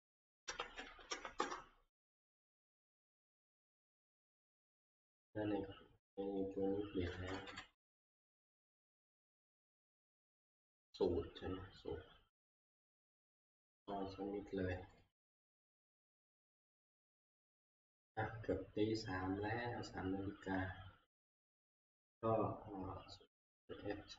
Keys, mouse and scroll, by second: 0.5-1.4 typing, 3.4 Return, 3.4 Tab, 5.4 Up, 6.5 typing, 6.6 Up, 6.6 click, 7.3 ctrl+Page_Down, 7.6 ctrl+Page_Down, 9.2 ctrl+Page_Down, 13.6 ctrl+Page_Down, 13.6 click, 15.0 click, 16.6 click, 23.4 click.